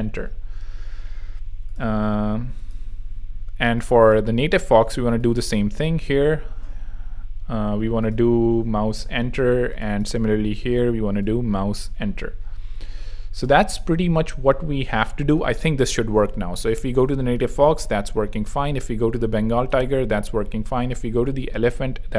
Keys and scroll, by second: 15.2 super+3, 15.8 super+r, 16.3 r.